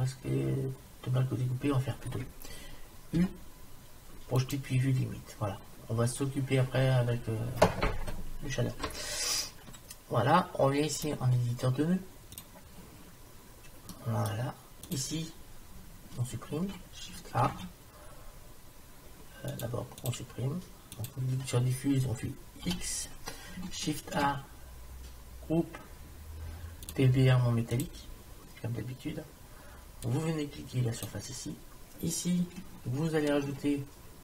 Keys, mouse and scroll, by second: 3.2 u, 5.3-8.0 middle drag, 11.0-13.0 drag, 13.9 middle click, 14.9-16.9 drag, 17.5 shift+a, 21.0 click, 22.7 x, 24.1 shift+a, 30.1-31.9 drag, 33.3 shift+Tab.